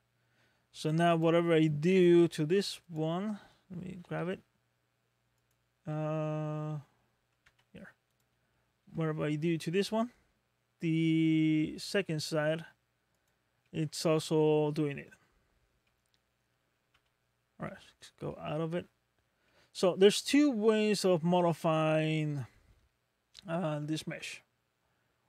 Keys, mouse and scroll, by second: 1.1 click, 1.9 click, 2.8 click, 4.1 g, 5.9 middle click, 7.5 Tab, 8.1 click, 8.9 g, 13.7 middle click, 15.2-15.7 scroll up 2, 15.8 middle click, 16.9 Tab, 17.5 scroll down 2, 18.3 shift+middle click, 19.0 scroll up 2, 19.5 middle click.